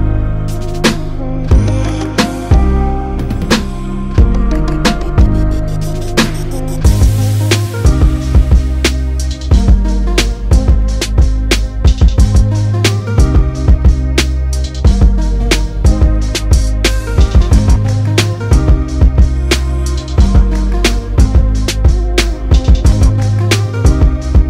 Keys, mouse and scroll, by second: 9.4 right click, 14.9-16.5 drag.